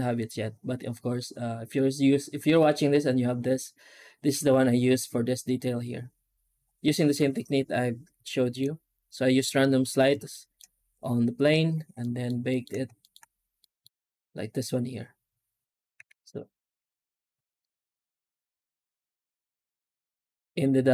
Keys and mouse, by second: 6.8 middle drag, 8.1 shift+middle drag, 10.2 shift+middle drag, 11.9 middle click, 12.3 shift+middle click, 13.5 middle click, 15.8 z, 17.6 middle click, 19.7 z.